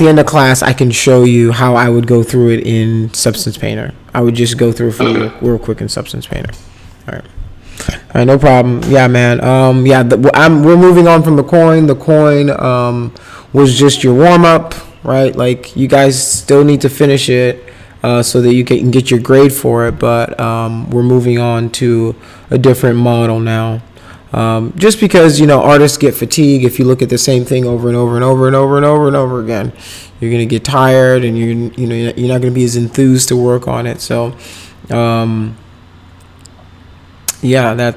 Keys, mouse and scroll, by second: 0.9 click, 4.3 click.